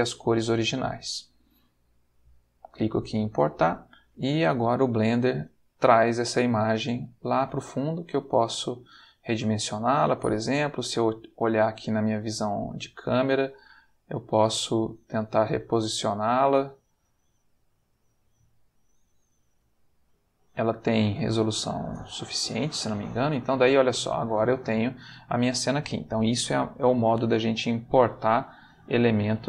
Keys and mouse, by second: 2.4 click, 5.9-7.5 ctrl+middle drag, 8.0 s, 9.3 click, 10.2 click, 11.2 ctrl+middle click, 11.8 ctrl+middle click, 12.8 ctrl+middle click, 13.5 ctrl+s, 15.6 click, 16.1 g, 17.8 click, 18.2 s, 19.3 click, 19.6 g, 22.1 click, 23.1 ctrl+middle click, 24.5 shift+middle click, 27.1-29.4 middle drag.